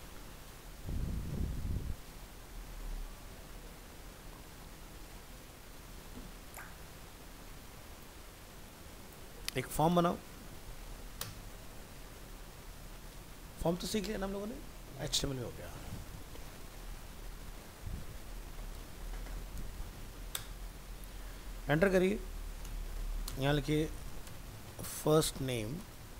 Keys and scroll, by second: 11.9 ctrl+s.